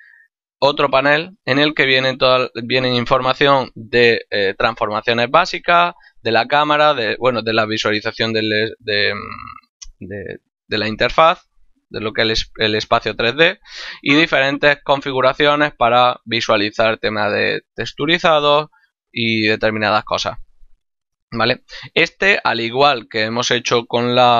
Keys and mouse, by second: 1.2 click, 5.5 middle click, 6.9 middle click, 12.3 middle click, 14.1 middle click, 21.3 middle click.